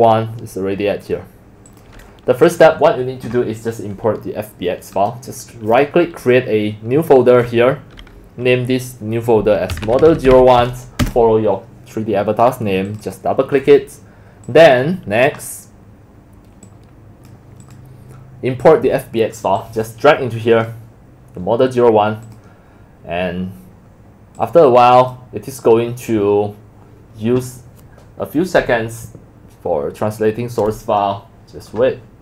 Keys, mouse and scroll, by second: 1.1 click, 1.5 drag, 2.5 click, 5.1 click, 6.2 click, 9.7-11.0 typing, 12.9 click, 13.0 click, 14.5 click, 15.4 click, 16.6 click, 16.8 click, 20.0 click.